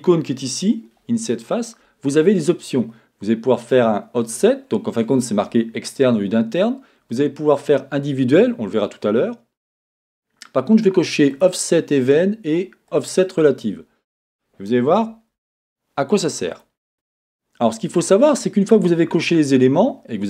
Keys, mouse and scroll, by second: 11.3 click, 12.9 click, 16.6 click.